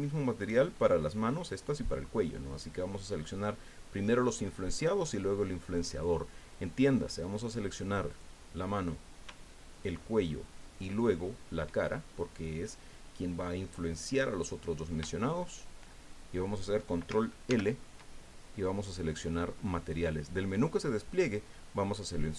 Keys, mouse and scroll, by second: 0.7 shift+scroll up 2, 8.1 right click, 9.7 shift+right click, 15.4 shift+right click, 17.5 ctrl+l.